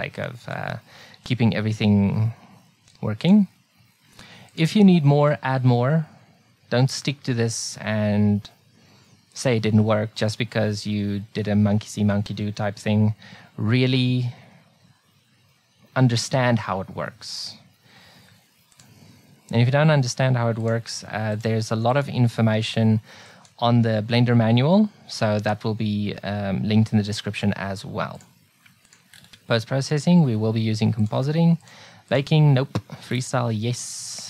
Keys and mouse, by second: 3.3-6.4 drag, 18.8-20.6 drag, 20.7-25.1 drag, 28.2-34.2 drag.